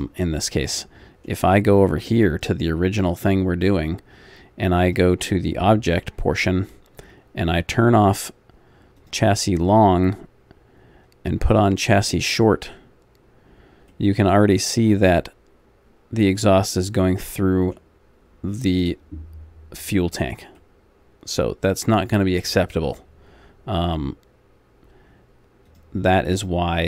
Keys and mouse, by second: 1.0-2.5 middle drag, 2.5-13.9 drag, 13.9 middle click, 16.6 middle click, 17.2-22.3 middle drag.